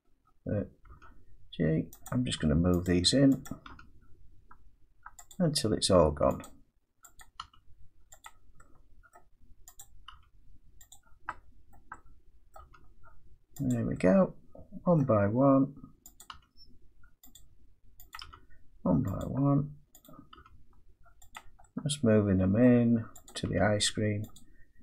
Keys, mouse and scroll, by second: 0.2-0.8 scroll down 3, 0.8 scroll, 0.9 g, 2.0 click, 2.8 click, 3.7 click, 3.7 g, 5.3 click, 6.4 click, 7.2 click, 7.4 g, 8.2 click, 9.1 middle click, 9.8 click, 10.1 g, 10.9 click, 11.7 middle click, 11.9 scroll, 12.6 middle click, 12.6 g, 13.7 click, 15.0 middle click, 16.2 click, 16.3 g, 17.3 click, 18.1 click, 18.2 g, 19.2 click, 20.0 click, 20.4 g, 21.3 click, 22.6 middle click, 23.3 click, 23.5 g, 24.3 click.